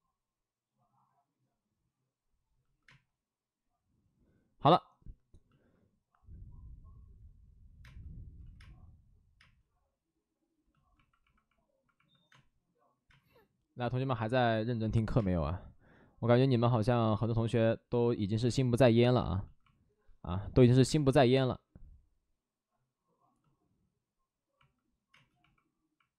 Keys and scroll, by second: 2.8 space, 7.7 space, 8.3 ctrl+z, 8.5 space, 9.3 space, 12.2 space, 18.2 ctrl+z, 18.3 space, 20.8 space, 21.3 space, 25.0 space, 25.9 alt+s.